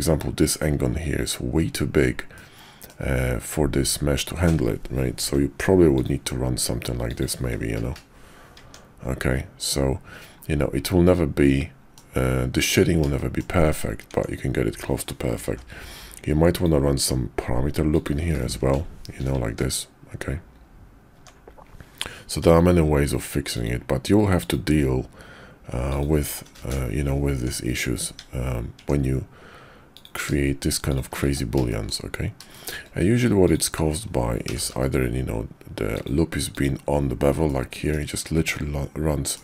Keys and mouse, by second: 2.3 click, 5.2 k, 8.6 Tab, 10.8-12.0 middle drag, 12.5 Tab, 13.1 shift+click, 14.1 Tab, 15.4 k, 19.4 Tab, 21.1 Tab, 22.4 k, 27.3 Tab, 28.0 Tab, 28.8 Tab, 29.9 click, 31.2 1, 31.7 shift+click, 32.5 shift+click, 34.5 g, 36.5 click, 37.5 click, 38.5 click.